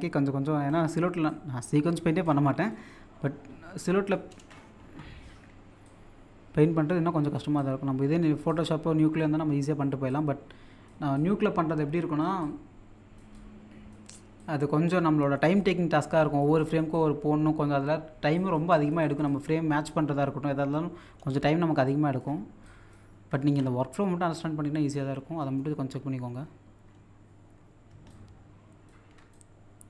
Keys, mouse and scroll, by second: 3.2-3.5 scroll down 1, 3.5-4.1 scroll up 1, 4.1 middle click, 5.9-9.5 drag, 9.5 middle click, 10.1-15.2 drag, 12.4 typing, 15.2 middle click, 15.6 click, 17.2 middle click, 17.8-18.3 scroll up 1, 18.4 click, 19.7 middle click, 21.6 middle click, 21.9 shift+click, 22.4 scroll up 1, 22.6 click, 23.4 ctrl+z, 25.4 middle click, 27.9 middle click, 28.0-29.8 shift+drag.